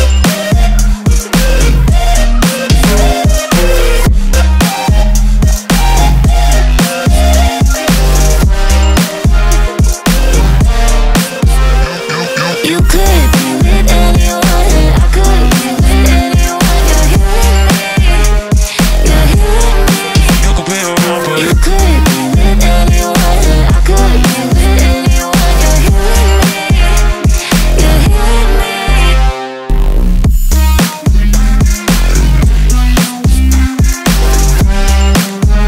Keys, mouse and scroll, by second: 1.1 shift+a, 2.6 click, 3.1 click, 3.7-4.5 scroll up 7, 4.5-8.4 middle drag, 15.6 Tab, 17.4 shift+a, 21.6 s, 25.9 g, 27.6 g, 30.1 shift+d, 32.1 Tab, 32.6 click, 34.3 Tab, 34.6 middle click, 35.4 click.